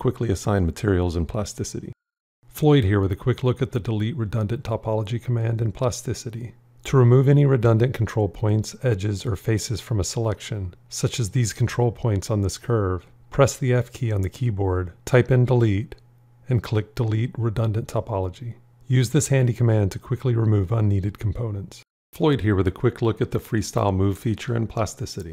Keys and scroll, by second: 13.3 f.